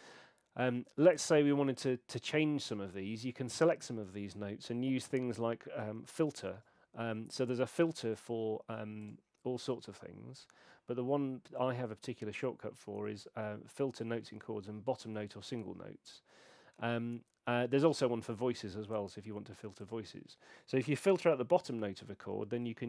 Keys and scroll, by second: 6.3 shift+super+b.